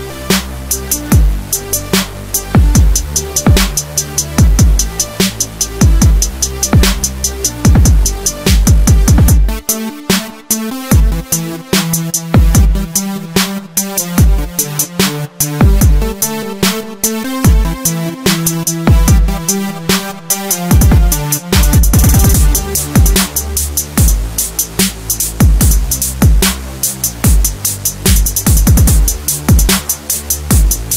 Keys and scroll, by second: 0.0 Return, 0.1 Escape, 6.0 Return, 6.9 Escape, 12.6 Escape, 14.3 Return, 15.0 Escape, 18.4 Return, 18.7 Escape, 19.9 Delete, 20.3 Escape, 23.6 Return, 30.5 Escape, 30.8 alt+7.